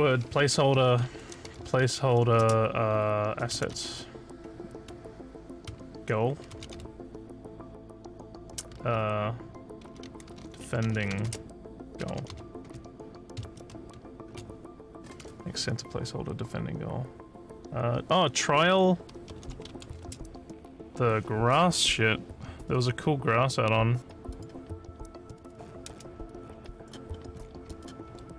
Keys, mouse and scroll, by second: 0.6-2.6 typing, 3.7 a, 6.6 a, 9.6-12.7 typing, 19.1-20.2 typing, 24.3 click, 26.2 alt+click, 27.1 alt+middle click, 27.7 click, 28.1 f.